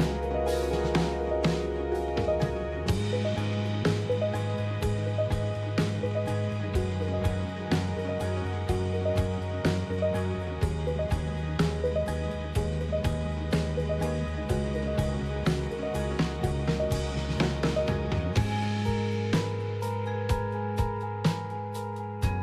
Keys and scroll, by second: 1.8 typing, 6.7 typing, 8.8 typing, 11.4-12.7 typing, 12.8 Tab, 14.2-15.0 typing, 21.3-22.4 typing, 21.6 Return.